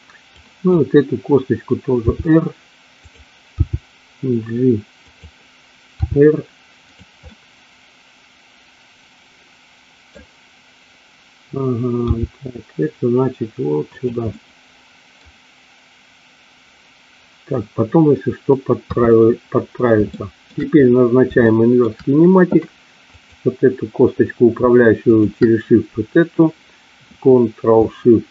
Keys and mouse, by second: 0.2 click, 2.0 r, 3.0 click, 3.5 g, 5.0 click, 6.0 r, 6.7 click, 7.3-10.1 middle drag, 12.1 g, 14.2-15.2 middle drag, 18.7 KP_3, 20.1 shift+middle click, 21.4 shift+middle click, 23.1 click, 25.1 shift+click.